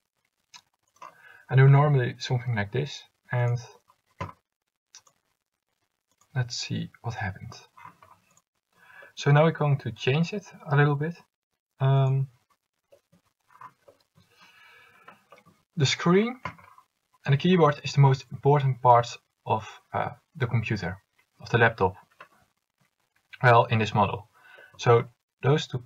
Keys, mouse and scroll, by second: 8.7-10.5 right drag.